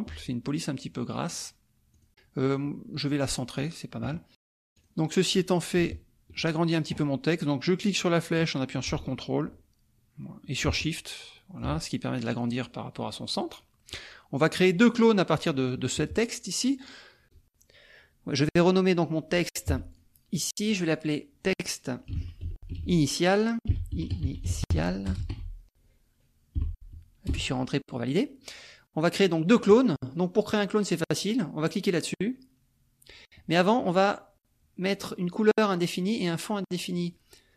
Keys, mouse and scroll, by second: 1.3 click, 2.0 click, 2.5-3.7 drag, 4.7 click, 8.3-11.7 drag, 12.6-14.1 drag, 15.2-17.3 drag, 17.2 ctrl+z, 17.8-19.1 ctrl+drag, 19.7 F1, 19.9 click, 21.0 click, 21.9-23.9 typing, 25.1 BackSpace, 25.2 a, 26.9 l, 27.3 Return.